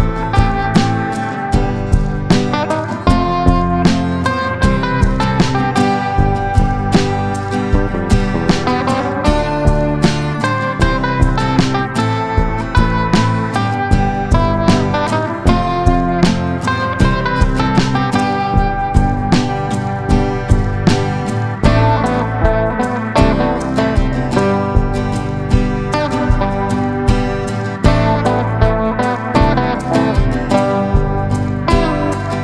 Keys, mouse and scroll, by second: 1.6-17.5 drag, 17.6 click, 19.9 click, 22.9 shift+click, 23.4 shift+click, 23.9 shift+click, 25.0 click, 30.7 F9.